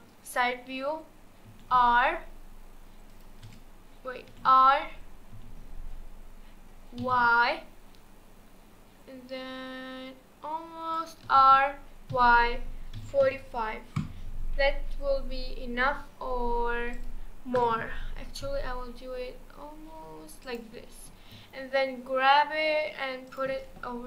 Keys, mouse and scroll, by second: 1.4 r, 3.4 t, 4.3 r, 11.3 r, 17.6 r, 21.3 g.